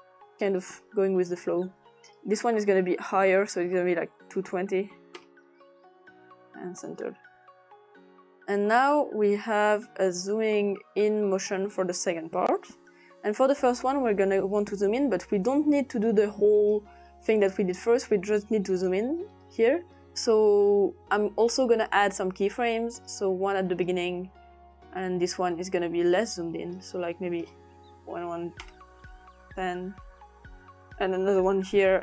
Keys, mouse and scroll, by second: 0.6 click, 2.1 click, 3.2 click, 4.0-5.0 typing, 4.4 click, 5.2 Return, 6.3 click, 8.5-12.7 drag, 13.2 click, 14.4 click, 15.4 click, 16.6 click, 17.3 click, 18.7 click, 19.3 click, 23.0 click, 26.2 click, 27.2 click, 27.7-28.8 typing, 30.2-31.5 drag.